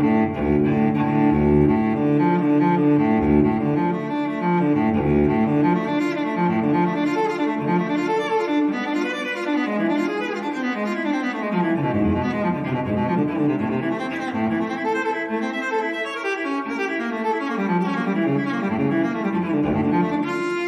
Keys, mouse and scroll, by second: 0.2 click, 1.1 click, 2.6 click, 4.7 click, 5.8 click, 7.0 click, 8.9 click, 9.8 click, 11.5 click, 14.8 click, 16.2 click, 17.6 click, 19.2 click.